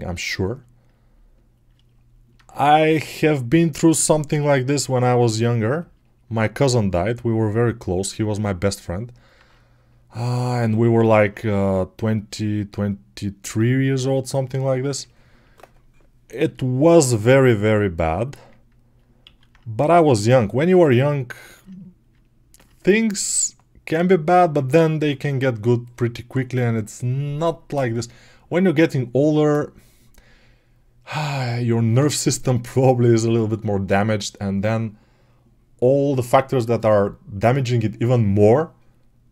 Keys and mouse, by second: 10.4-15.3 alt+shift+right drag, 15.3-20.9 alt+drag, 19.6 alt+q.